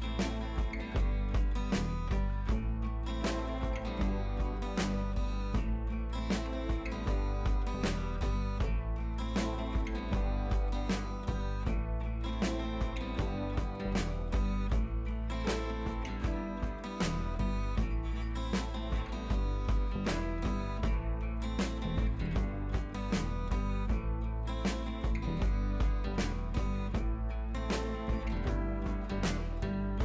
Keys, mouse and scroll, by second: 1.0 scroll down 1, 2.0 scroll up 1, 3.4 click, 5.2 scroll down 1, 5.6 scroll up 1, 6.9 click, 7.9 ctrl+z, 8.3 scroll up 1, 8.8 click, 9.5 scroll down 1, 9.9 scroll up 1, 10.5 scroll down 1, 10.9-11.4 scroll up 1, 11.7 click, 14.2 scroll down 1, 14.6 scroll up 1, 14.9-15.3 scroll down 1, 15.3-15.7 scroll up 1, 16.0-17.9 drag, 18.3 click, 19.5 ctrl+z, 20.6 click, 21.7 scroll down 1, 22.7 ctrl+z, 23.3 scroll up 1, 24.1-26.9 drag, 26.9 scroll down 1, 27.3 scroll up 1, 28.1-29.5 drag, 29.7 scroll down 1.